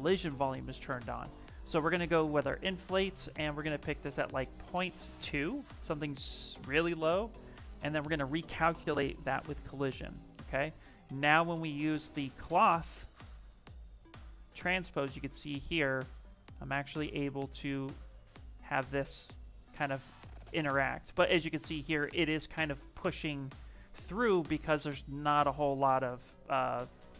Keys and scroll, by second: 22.0 ctrl+z, 23.3 ctrl+z, 24.2 q.